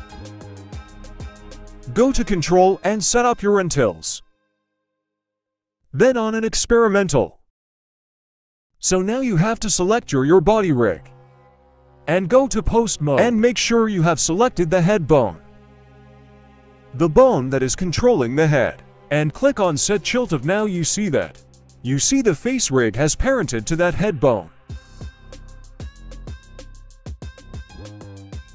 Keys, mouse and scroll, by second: 0.1 click, 3.0 click, 6.7 click, 9.8-10.8 drag, 11.1 scroll up 1, 11.3 middle drag, 11.9 right click, 12.5 right click, 13.3 r, 14.5 middle click, 14.9 r, 17.2 middle click, 19.7 click, 21.0 r, 22.5 middle click, 23.2 right click, 24.2 r, 24.9 click, 24.9 right click, 25.5 r.